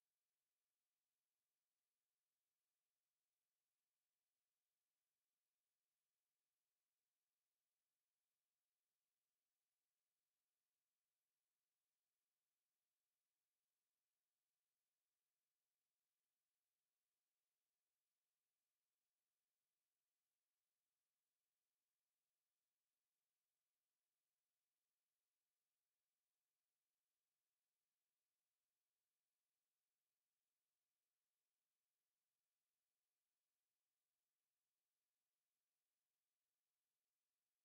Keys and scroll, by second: 18.5 n, 19.0 Return.